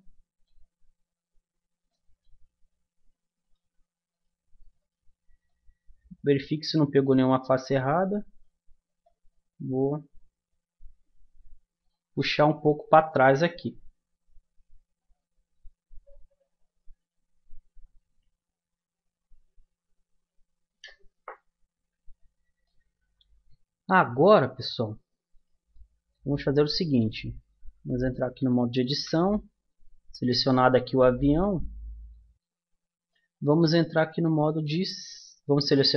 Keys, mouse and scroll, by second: 3.4-6.7 middle drag, 9.0-10.6 drag, 10.9 middle click, 21.9 a, 22.6-23.9 middle drag, 23.9 Tab, 25.3 click, 26.9 middle click, 27.8 Tab, 29.7 Tab, 31.2 Tab, 35.5-35.9 middle drag.